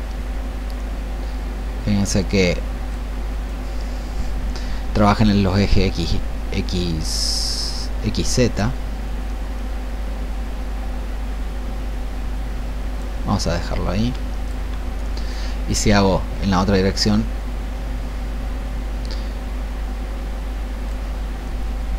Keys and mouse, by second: 12.2-21.9 drag.